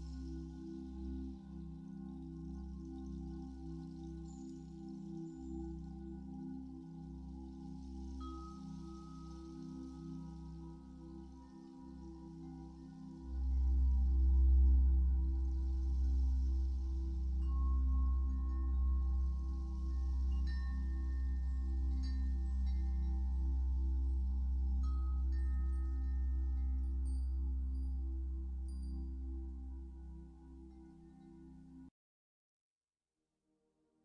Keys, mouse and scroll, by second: 4.1 click, 4.5-11.4 middle drag, 5.1 scroll up 2, 9.7 scroll up 2, 10.5 f, 11.4 click, 12.5-34.0 drag, 15.4 ctrl+z, 20.1 ctrl+z, 24.6 f.